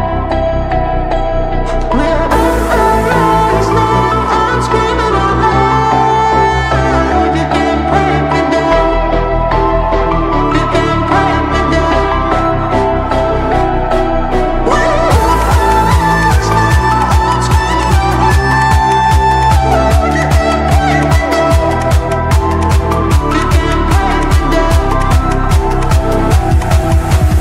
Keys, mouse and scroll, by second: 1.3-1.8 drag, 10.0-11.1 scroll down 1, 13.5 ctrl+z, 15.0 click, 15.9 Right, 17.0-17.6 scroll up 1, 19.2 click, 19.9 shift+Page_Up, 21.2 F2, 21.7-23.5 drag, 24.9 F9, 25.7 click, 27.3 shift+F11.